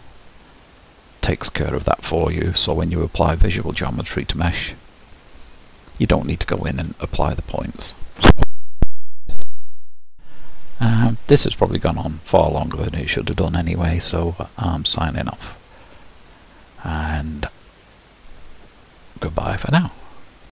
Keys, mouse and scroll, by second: 2.1-3.3 shift+middle drag, 3.3 click, 3.7-4.3 scroll down 5, 4.3-8.8 middle drag, 8.8 g.